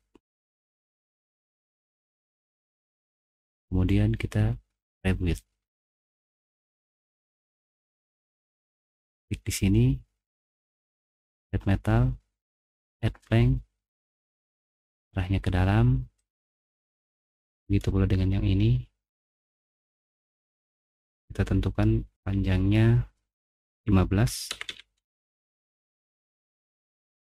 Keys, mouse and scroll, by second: 0.1 typing, 3.7 click, 6.0 middle click, 6.4 middle click, 7.1 click, 11.2 click, 12.6 click, 16.2 click, 19.9 click, 20.8 click, 21.4 click, 22.2 click, 23.4-25.0 typing.